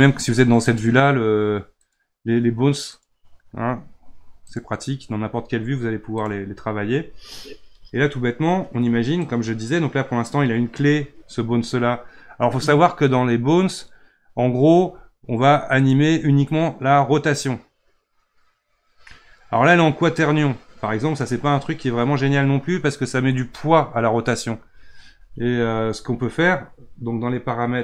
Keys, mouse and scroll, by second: 0.6 click, 1.8 click, 2.9 click, 4.4 click, 6.1 click, 9.3-12.3 drag, 15.7 click.